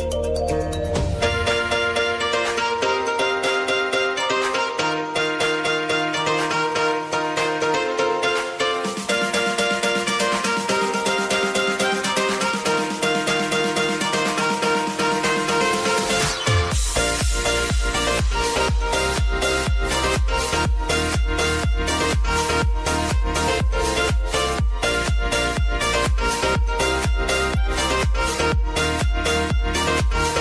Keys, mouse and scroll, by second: 1.1-2.8 drag, 9.7 u, 11.0-16.3 drag, 16.3 space, 19.4 space, 19.7 click, 23.8 click, 24.5 ctrl+d, 25.2 click, 25.8 s, 26.7-29.5 drag.